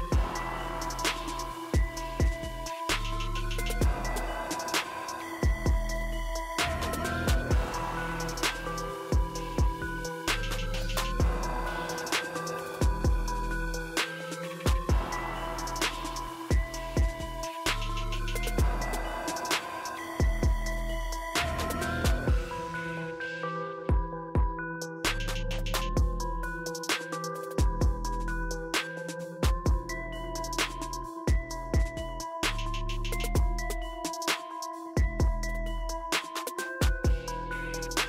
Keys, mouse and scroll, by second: 2.9 click, 30.3 click, 31.9 typing, 33.0 click, 34.6-35.5 typing, 35.5 click.